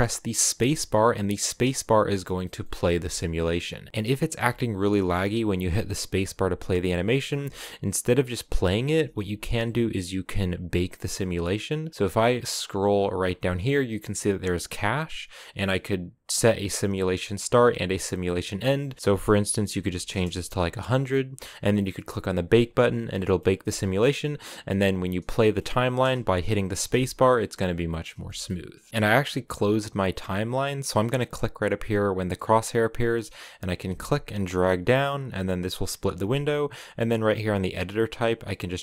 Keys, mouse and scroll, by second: 0.3 space, 1.6-3.9 middle drag, 3.9 scroll up 1, 4.1 space, 6.4 space, 7.1 space, 9.0 space, 22.9 middle click, 23.4 space, 25.4 middle click, 26.0 space, 26.5 space, 27.5-33.5 middle drag, 33.5-35.2 drag.